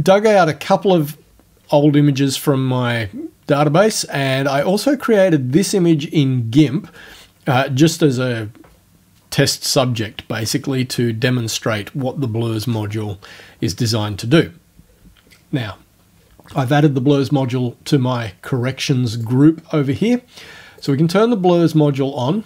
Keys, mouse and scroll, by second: 4.6 click, 19.2 click, 20.8 click.